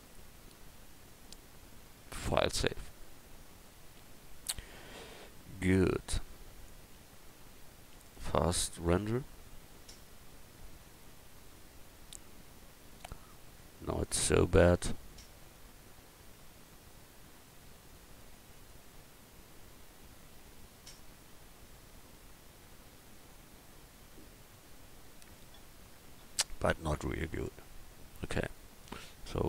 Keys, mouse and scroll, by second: 9.1-10.1 drag, 16.3-18.2 middle drag.